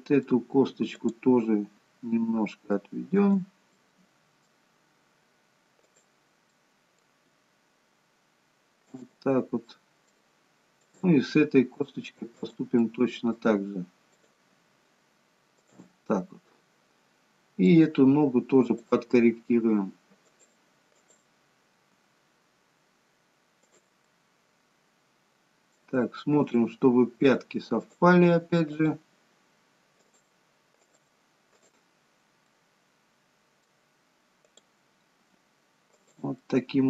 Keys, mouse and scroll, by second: 1.9 click, 1.9 g, 3.8 middle click, 5.9 click, 6.6 middle click, 7.3 g, 9.7 middle click, 11.0 click, 11.2 g, 12.9 middle click, 14.1 click, 14.6 g, 16.1 middle click, 19.0 click, 19.2 g, 21.1 click, 22.1 g, 25.0 middle click, 26.5 click, 27.1 g, 28.8 click, 29.1 g, 30.8 click, 31.6 click, 32.2 scroll up 2, 32.5 middle click, 34.5 click, 35.4 g, 36.5 middle click.